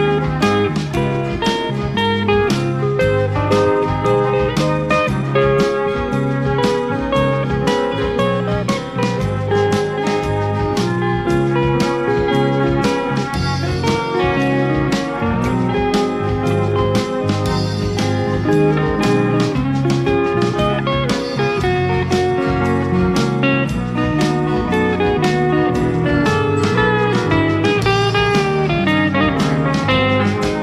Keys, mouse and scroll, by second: 0.0 KP_Add, 1.0 space, 8.4 click, 15.0 shift+F6, 16.7 click, 19.5 KP_Add, 20.4 space, 23.5 click, 26.3 click, 30.0 click.